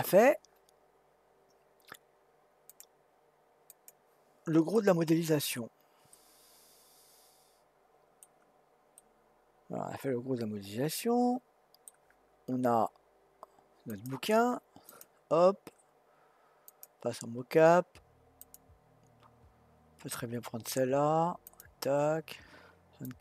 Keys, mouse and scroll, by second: 2.7 click, 3.7 click, 4.7 middle click, 5.5-6.1 scroll down 2, 6.1-8.3 middle drag, 8.3-9.0 scroll down 1, 9.0-12.0 middle drag, 13.9 click, 15.2-18.0 drag.